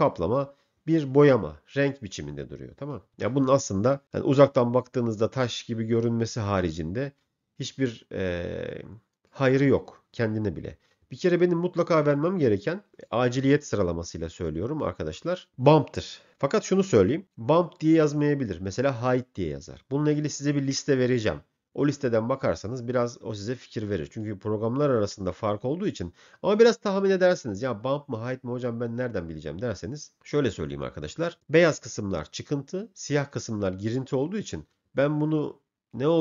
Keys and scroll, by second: 3.2 m.